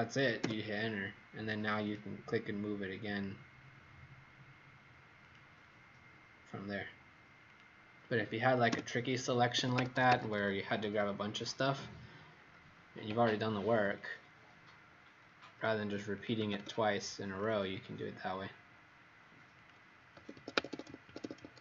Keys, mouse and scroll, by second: 1.8 click, 8.6 Return, 9.5 Escape, 9.7 Escape, 9.9 Escape, 10.0 Escape, 10.2 Escape, 14.0 click, 16.3 s, 17.8 click, 20.3 Escape, 20.5 Escape.